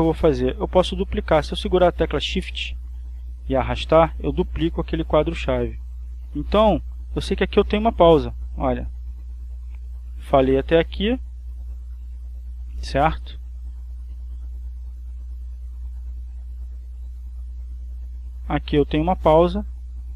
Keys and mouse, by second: 1.2 click, 3.6-5.7 shift+drag, 6.6-20.1 drag.